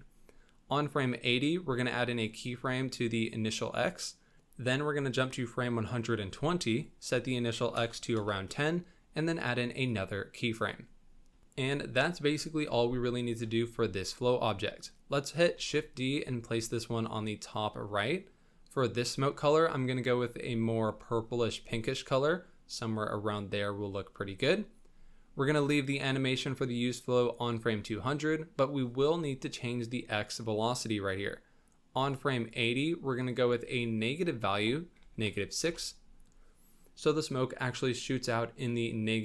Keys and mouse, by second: 2.6 click, 4.7-5.8 drag, 6.7-8.1 drag, 9.8 click, 13.0 shift+middle drag, 15.6 shift+d, 19.0 click, 32.0 click, 33.7-35.7 drag.